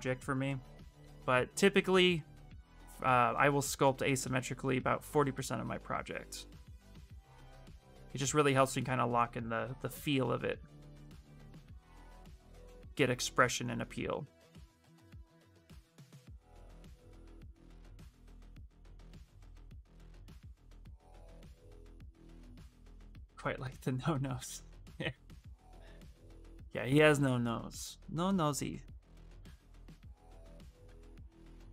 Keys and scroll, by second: 7.0 s, 27.5-28.7 typing, 30.1 s, 31.0 s.